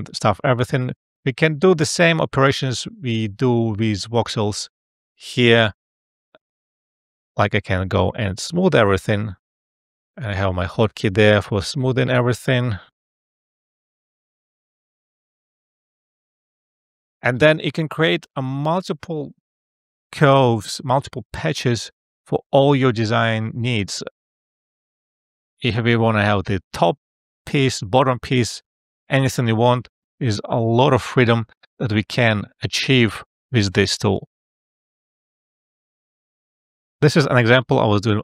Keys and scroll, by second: 4.1 space, 7.2 space, 10.8 F12.